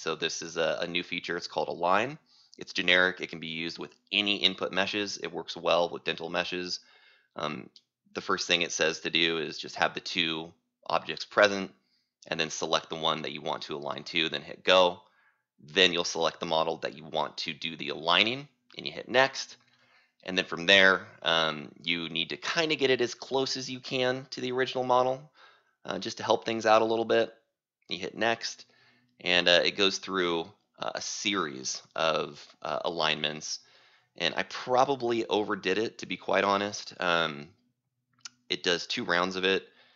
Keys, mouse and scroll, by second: 14.5 click, 19.2 click, 20.4 click, 24.5-30.0 drag.